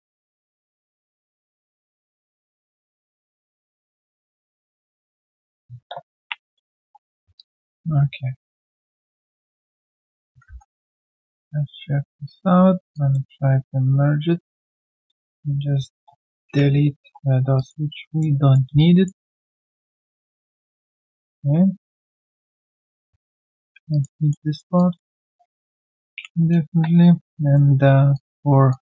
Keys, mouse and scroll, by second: 1.0 alt+right click, 1.1 alt+click, 1.5 alt+right click, 1.8 alt+click, 2.6 double click, 3.1 shift+click, 4.8 shift+click, 6.2 ctrl+Delete, 7.3 alt+click, 9.2 alt+middle click, 9.5 alt+click, 11.2 3, 11.3-11.7 alt+scroll down 1, 12.1 right click, 12.5-13.3 scroll down 1, 13.4 shift+right click, 16.5 Delete, 17.5 alt+right click, 18.0 alt+click, 18.4 alt+right click, 18.7 q, 18.7 right click, 23.4 shift+click, 23.9 alt+right click, 24.1 alt+middle click, 24.4 alt+right click, 24.7 alt+click, 26.1 ctrl+Delete, 27.1 typing, 27.3 right click.